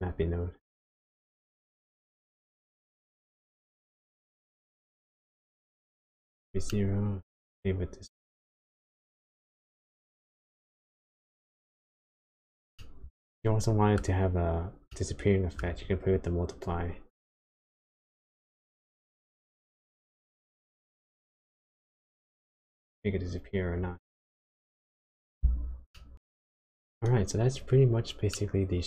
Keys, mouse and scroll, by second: 1.6 middle click, 3.5 middle click, 4.9 click, 6.7 middle click, 8.7 shift+click, 12.7 middle click, 14.9 middle click, 17.0 shift+click, 25.9 middle click, 26.8-28.1 scroll down 9, 28.3 middle click.